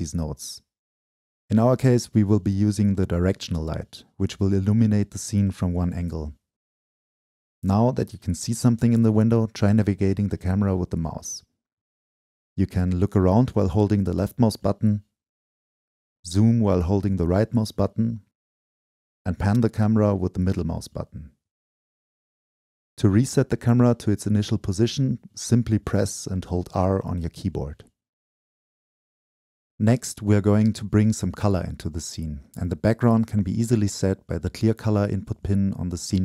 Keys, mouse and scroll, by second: 4.1-6.9 drag, 9.7 click, 12.9-16.7 drag, 18.6 right click, 18.7 click, 18.9 right click, 19.0 click, 19.1 right click, 19.7 right click, 23.0 middle click, 23.4-24.4 scroll up 2, 24.4-26.5 drag, 29.0-31.0 drag, 32.6 shift+click, 32.6 shift+scroll down 2, 33.5 click, 34.8-36.2 drag.